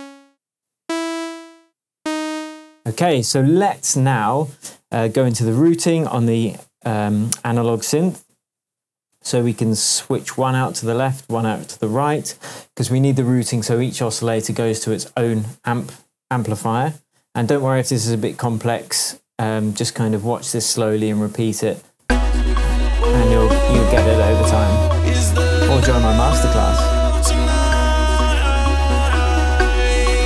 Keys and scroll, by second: 3.3 shift+Tab, 22.0 space.